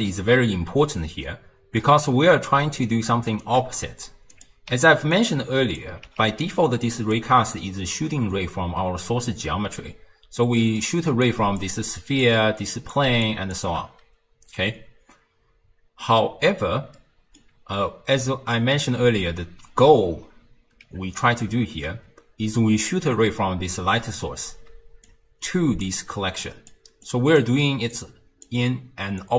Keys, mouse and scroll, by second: 2.6 d, 3.1 right click, 3.5 d, 3.6 d, 4.3 click, 4.8 x, 5.2 click, 6.1 x, 6.5 click, 10.3-13.6 typing, 11.3 click, 12.0 click, 12.6 click, 13.3 click, 17.0-18.2 middle drag, 18.2 d, 18.6-19.9 right drag, 19.9 d, 24.7 d, 25.1-25.9 drag, 25.9-29.3 typing, 26.4 click, 27.1 click, 28.0-28.5 drag, 29.2 click.